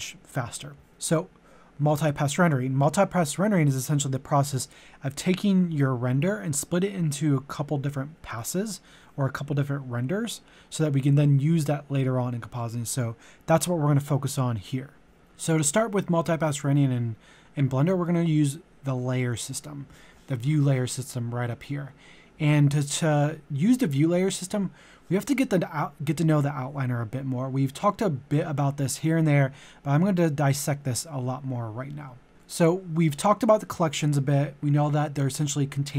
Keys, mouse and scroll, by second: 15.1 click.